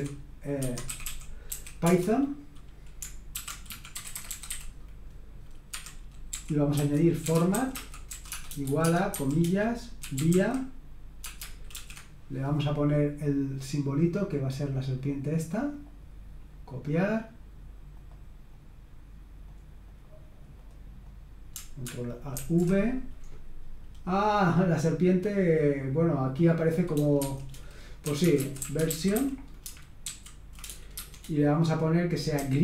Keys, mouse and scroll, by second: 0.0-1.5 typing, 0.6 Escape, 1.8 Return, 3.1-11.7 typing, 5.8 Escape, 14.0-15.5 drag, 17.0 click, 17.9 click, 18.5 click, 19.4-20.5 drag, 20.7 click, 22.4 ctrl+alt+v, 27.2-30.9 typing, 32.1-32.6 typing.